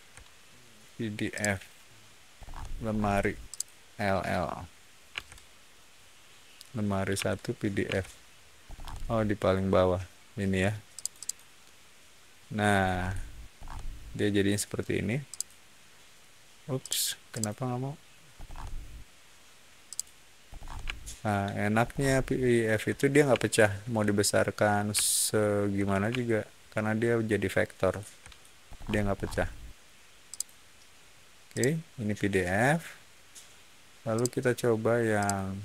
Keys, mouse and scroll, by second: 1.2 click, 2.3 middle click, 2.8 middle click, 3.4 click, 5.0 l, 8.6-9.8 middle drag, 10.9 click, 11.1 click, 12.7 scroll down 1, 13.5 scroll up 1, 15.2 click, 16.7 click, 17.2 click, 18.3 middle click, 19.8 click, 20.4 middle click, 20.8 scroll up 1, 21.7 ctrl+middle click, 21.7 scroll up 1, 22.5 ctrl+middle click, 22.5 scroll down 1, 23.2 ctrl+middle click, 23.2-23.8 scroll up 2, 25.1 scroll up 1, 26.1-26.6 scroll down 1, 27.2 scroll down 1, 27.6 ctrl+middle click, 28.6 ctrl+middle click, 29.0 ctrl+middle click, 30.2 ctrl+click, 31.4 ctrl+click, 34.1 ctrl+click, 35.1 ctrl+click.